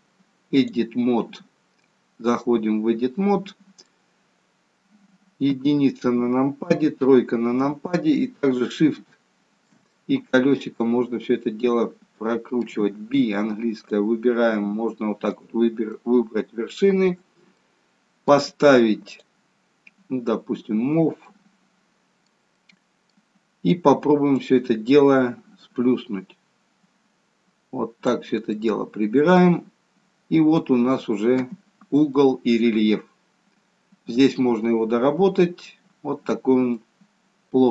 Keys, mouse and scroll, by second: 1.8 middle click, 5.5 KP_1, 6.7 KP_3, 8.8 shift+middle click, 9.8 middle click, 13.1 b, 16.0 middle click, 17.5 middle click, 18.9 click, 21.3 middle click, 22.6 middle click, 24.4 click, 28.4 middle click, 29.7-30.6 scroll up 4, 30.6 middle click, 30.6-31.4 scroll up 1, 32.2 middle click, 36.1-36.8 scroll down 1, 36.8 middle click, 36.8-37.4 scroll down 2.